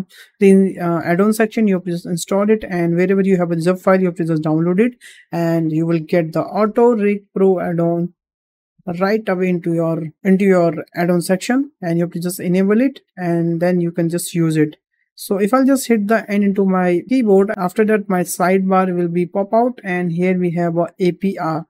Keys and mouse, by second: 16.3 n, 21.3 click.